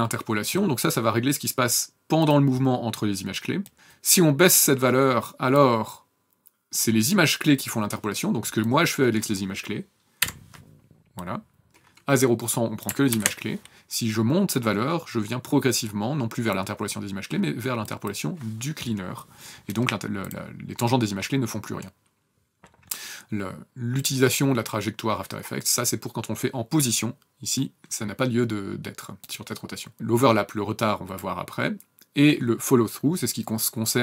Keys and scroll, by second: 10.2 F9, 13.1 ctrl+z.